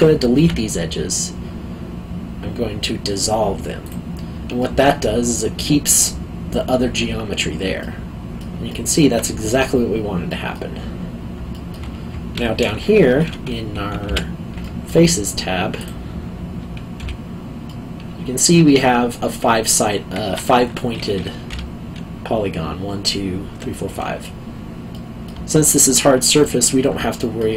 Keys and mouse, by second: 0.4 x, 3.8 click, 4.6 middle click, 7.8 middle click, 8.7 alt+middle click, 10.3 alt+middle click, 11.5 alt+middle click, 14.0 3, 14.6 middle click, 15.8 click, 16.9 `, 17.6 middle click, 21.5 1, 24.9 middle click, 25.5 alt+middle click, 27.1 alt+middle click.